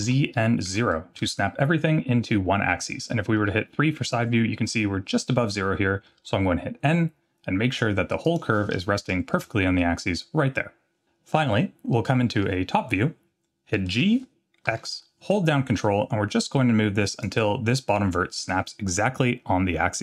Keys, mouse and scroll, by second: 3.4 KP_3, 4.2-5.2 scroll up 4, 5.2 scroll down 1, 6.2 n, 8.2-10.2 drag, 11.9 middle click, 12.6-13.1 scroll down 2, 13.9 scroll down 1, 13.9 g.